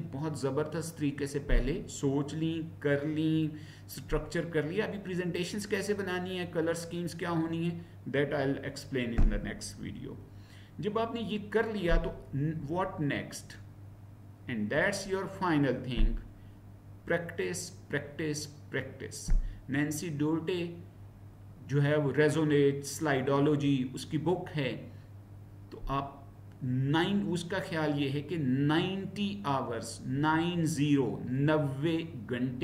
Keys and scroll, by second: 12.6 Right, 14.7 Down.